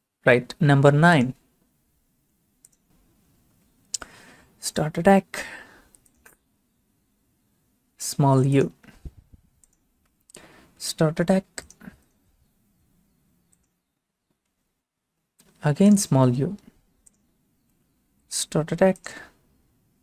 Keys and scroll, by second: 3.3 9, 10.7 u, 18.2 u.